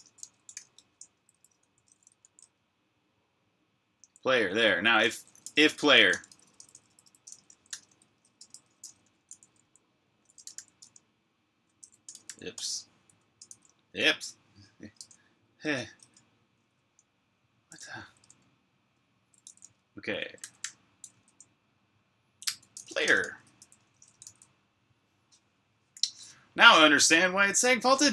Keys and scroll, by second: 3.5-11.6 typing, 13.8-21.0 typing, 17.7 Escape, 22.3-25.6 typing, 24.1 super+r.